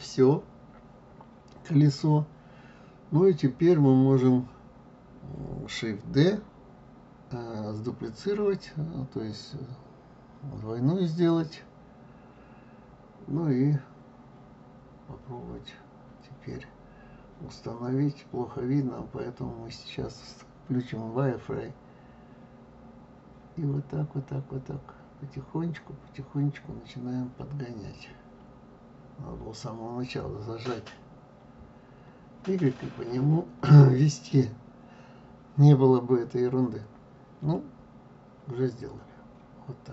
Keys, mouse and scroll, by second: 21.1 click, 22.1-22.8 scroll up 1, 22.8-24.6 scroll up 1, 24.6 g.